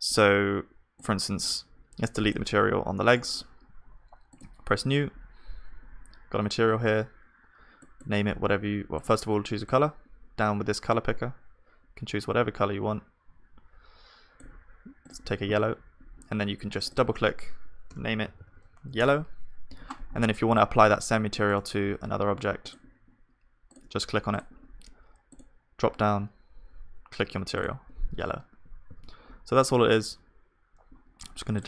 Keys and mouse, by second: 3.0-18.4 drag, 3.0-18.4 right drag, 18.4-20.3 middle drag, 18.4 l, 20.3 w, 23.5 click, 23.5-28.9 middle drag, 23.5-28.9 right drag, 28.9 ctrl+z.